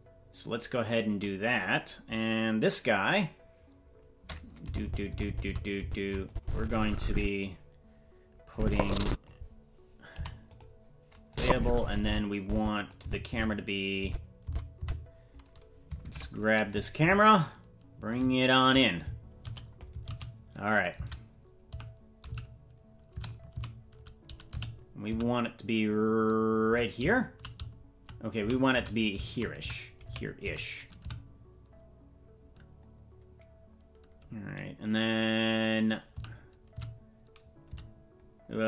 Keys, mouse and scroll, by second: 4.6 Left, 4.8 Left, 5.1 Left, 5.2 Left, 5.4 Left, 5.8 Left, 6.2-7.4 drag, 8.5 click, 10.1 i, 11.3-12.8 drag, 13.0 Right, 13.3 Right, 14.4 Left, 14.8 Right, 16.0 shift+`.